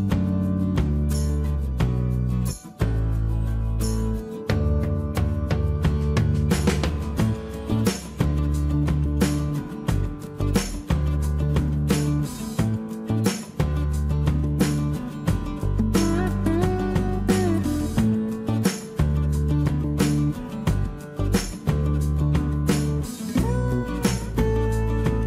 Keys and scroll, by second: 3.3 p, 7.0 space, 7.1 Escape, 7.9 space, 8.2 space, 8.2 Escape, 12.6 p, 13.4 space, 13.5 Escape, 16.1 Escape.